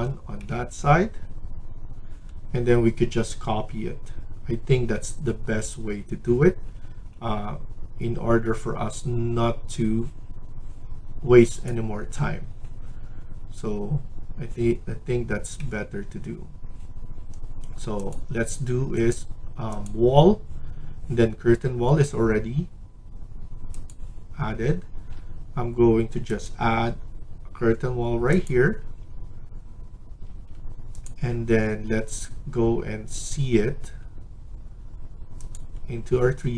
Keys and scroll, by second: 24.8 Escape, 28.7 Escape, 30.1 Escape.